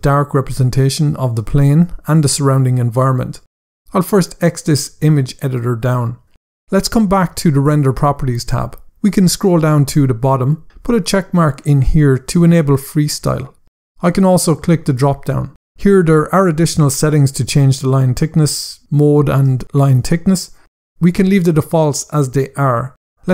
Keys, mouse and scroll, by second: 3.9 click, 7.4 click, 9.0 scroll down 1, 11.1 click, 15.2 click, 15.8 scroll down 1.